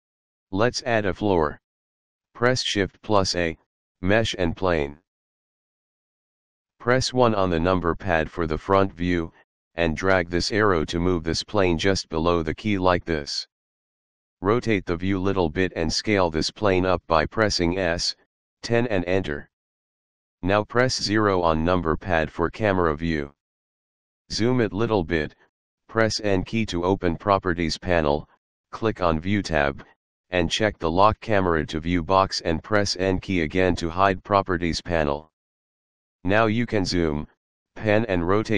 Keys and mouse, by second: 3.2 shift+a, 6.5 click, 8.1 KP_1, 10.4 click, 15.2 middle click, 17.2 s, 18.4 KP_1, 18.7 KP_0, 19.7 Return, 21.4 KP_0, 26.0 n, 28.6 click, 31.1 click, 33.4 n, 36.3 click, 37.2 middle click, 37.9 middle click.